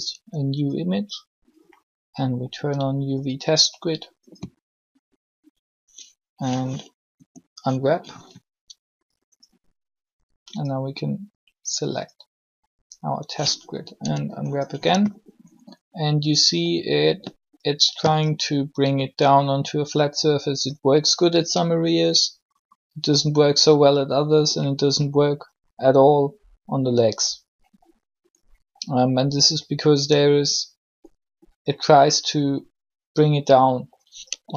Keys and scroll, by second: 7.0 u, 13.9 u.